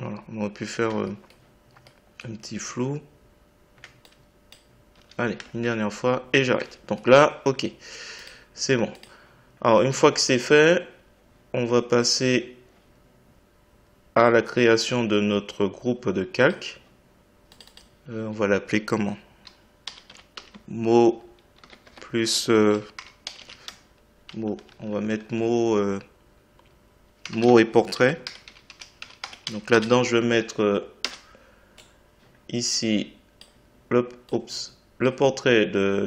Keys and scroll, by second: 4.9 Delete.